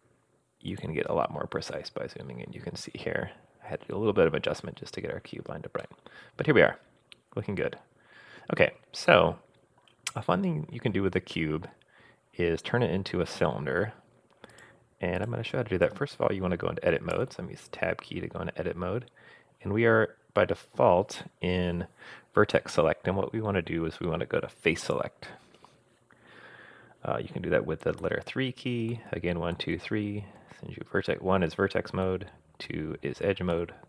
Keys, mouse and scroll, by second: 1.8-2.6 scroll up 3, 3.4 scroll down 2, 5.3-6.3 scroll down 6, 5.8-9.9 middle drag, 14.5 click, 15.2 click, 17.1 Tab, 24.9 click, 28.0-30.4 typing, 32.0 2, 33.5 3.